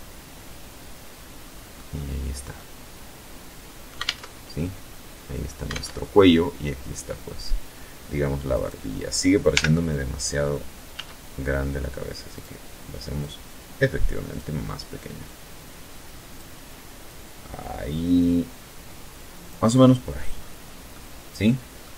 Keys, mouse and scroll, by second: 0.7 scroll down 1, 1.3-2.7 middle drag, 2.7 alt+Tab, 4.4 alt+Tab, 7.2 right click, 8.2 l, 9.6 s, 11.0 click, 11.9-13.2 drag, 13.9-15.2 drag, 15.8-18.3 drag, 18.5 middle click, 19.0-19.5 scroll down 1, 19.5 scroll up 1, 19.6-20.7 middle drag, 20.7-21.3 scroll up 1, 21.3 z, 21.5-21.9 middle drag.